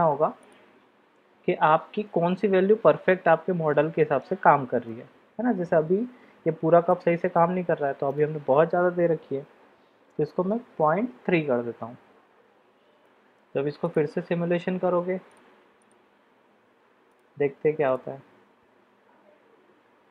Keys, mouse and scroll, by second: 0.5-1.3 drag, 3.6-4.2 middle drag, 4.8-7.0 middle drag, 8.1-11.9 drag, 13.0-13.4 middle drag, 13.9-15.9 drag, 17.1-17.4 drag, 17.8 click.